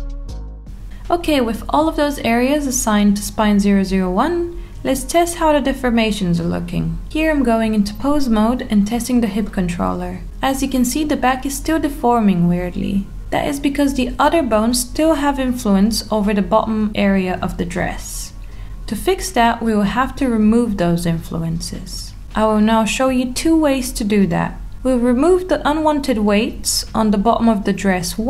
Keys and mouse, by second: 0.8 click, 1.7 alt+middle click, 3.1 click, 3.6 Tab, 6.4-7.1 middle drag, 7.4 g, 11.2 click, 11.7-12.9 middle drag, 14.1-14.5 middle drag, 15.5 Tab, 16.5-17.5 middle drag, 19.0 click, 19.4-20.6 middle drag, 21.3-22.5 middle drag, 22.8 shift+middle click, 26.6-27.9 middle drag.